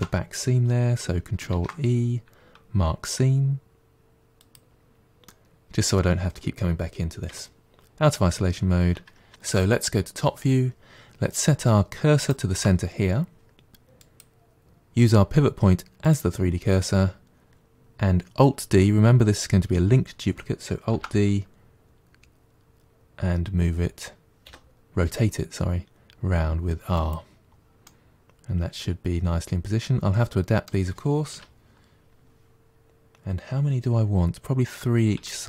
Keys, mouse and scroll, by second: 1.4 ctrl+e, 5.1-7.1 middle drag, 7.1 KP_Divide, 8.3-9.3 scroll down 1, 9.3 KP_7, 12.1-13.8 shift+right drag, 13.8-16.8 drag, 20.8 alt+d, 27.7-30.7 middle drag, 31.2 KP_7, 33.4-35.1 scroll down 1, 35.1-35.4 shift+middle drag.